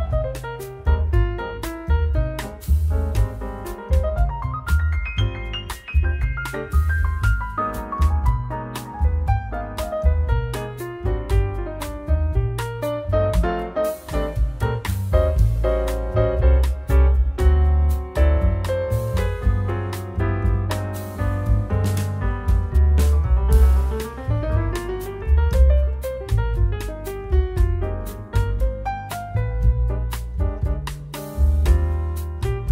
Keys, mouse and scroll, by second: 1.4 click, 3.3 click, 3.9 middle click, 5.3-5.7 scroll down 1, 5.7 middle click, 8.7 click, 12.0-13.3 scroll up 5, 12.1 middle click, 13.3 click, 14.5 middle click, 17.8 click, 19.6 click, 21.6 click, 22.5 click, 24.0 middle click, 27.7 click, 29.7 click, 31.9 click.